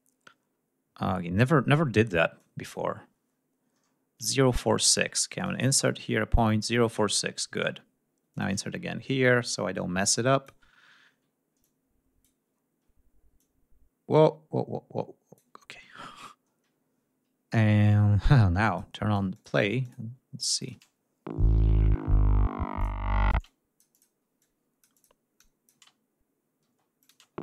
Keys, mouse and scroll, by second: 0.0-0.3 scroll down 2, 2.0-2.5 drag, 4.7 d, 5.0 click, 7.9 click, 8.5 ctrl+scroll up 2, 9.1 ctrl+click, 10.3 ctrl+scroll down 2, 11.2 click, 12.1 ctrl+scroll up 2, 13.0-15.1 drag, 15.2 ctrl+scroll down 2, 15.7 ctrl+scroll up 2, 16.4 ctrl+scroll up 2, 17.3 scroll down 2, 18.2 ctrl+click, 19.4 ctrl+click, 20.2 click, 20.4 space, 21.9 ctrl+scroll up 2, 22.4 ctrl+click, 22.9 space, 23.0 click, 24.0 click, 25.0 click, 25.4 space, 26.2 space, 26.6 click.